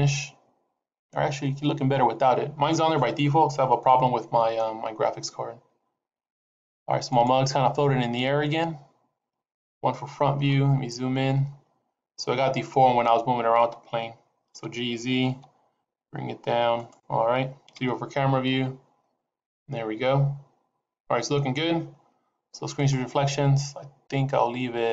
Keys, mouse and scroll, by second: 3.8 shift+middle click, 4.8 scroll up 2, 7.0 click, 9.7 KP_1, 10.3-11.7 scroll up 10, 14.5 g, 17.6 KP_0, 18.7 scroll down 2, 23.3 click.